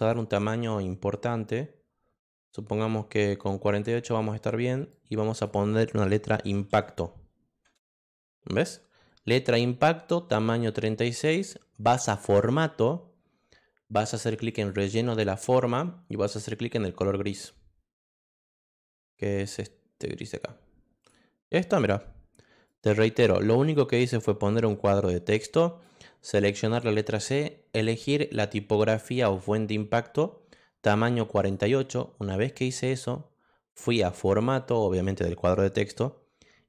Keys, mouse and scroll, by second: 0.0 click, 3.7 click, 5.2 click, 6.4 i, 7.7 Return, 12.2 click, 14.5 click, 20.2 click, 21.0 click, 22.6 click, 24.8 click, 31.4 click, 34.0 click.